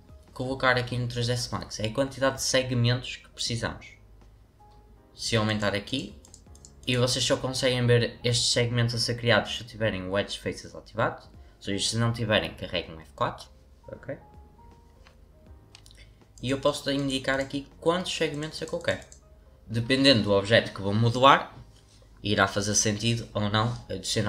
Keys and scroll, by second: 12.3 F4, 13.2 F4.